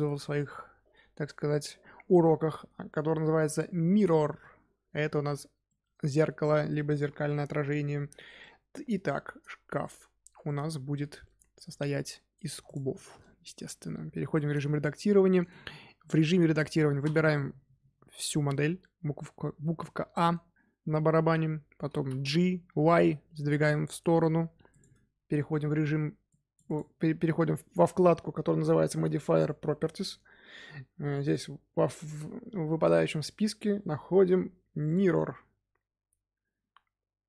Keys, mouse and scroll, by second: 3.4 click, 3.9-5.6 drag, 5.6-6.5 middle drag, 6.5 scroll down 1, 6.9 KP_1, 8.3-10.8 middle drag, 10.8-11.2 scroll up 2, 11.2 Tab, 12.6 click, 12.9-14.2 shift+middle drag, 14.2 3, 15.0-17.0 middle drag, 17.0 a, 21.8 g, 25.0 Tab, 26.2 click, 31.2-34.3 drag.